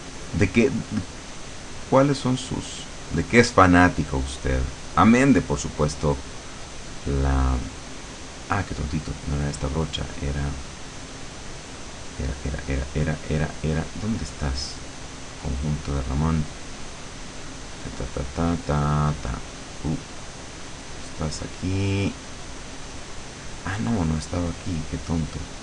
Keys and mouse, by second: 1.5 click, 2.6 click, 4.1 click, 6.1-7.9 drag, 10.3 click, 12.6 click, 13.5 click, 14.8 click, 15.5 click, 15.9 click, 16.3 click, 17.5-18.9 drag, 19.7 click, 20.9-24.3 drag, 25.5 click.